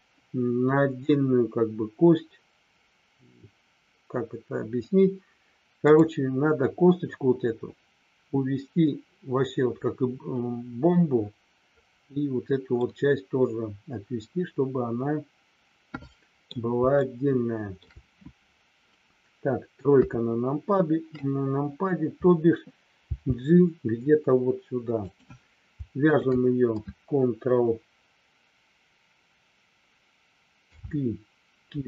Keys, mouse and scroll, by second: 5.8 click, 12.8-16.4 middle drag, 17.0 shift+middle click, 19.9 KP_3, 25.0 click, 26.1 shift+click, 30.7 ctrl+p.